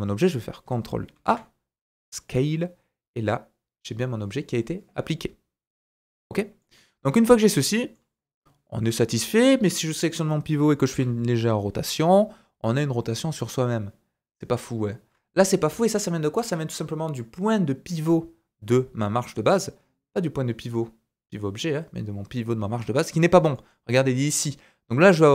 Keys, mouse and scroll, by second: 1.1 ctrl+a, 4.2-8.8 middle drag, 7.1-7.4 scroll up 1, 7.4 scroll down 1, 8.8 click, 8.9-10.3 middle drag, 10.9 r, 16.3 middle click, 21.6-23.1 middle drag, 23.1 click, 23.1-25.3 middle drag.